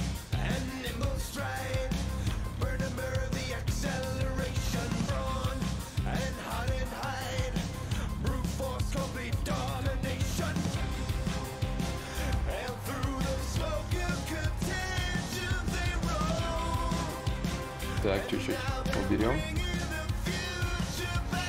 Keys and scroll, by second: 11.3 ctrl+z, 11.3 ctrl+y.